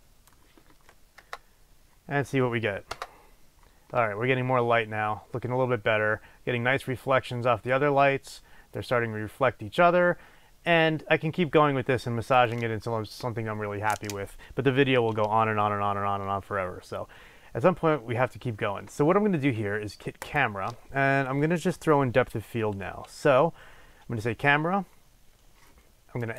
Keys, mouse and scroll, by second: 1.3 KP_0, 20.3 click.